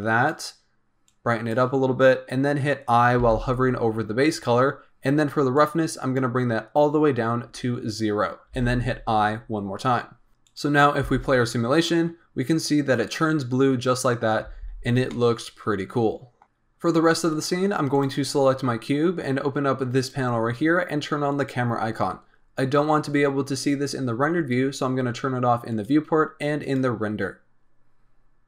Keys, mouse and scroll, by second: 3.1 i, 5.5-8.5 drag, 8.5 i, 10.5 click, 11.0 space, 14.7 space, 14.8 scroll down 2, 15.0-16.4 middle drag, 16.4 scroll up 10, 17.9 click, 19.9-22.9 drag, 25.7 click, 26.6 click.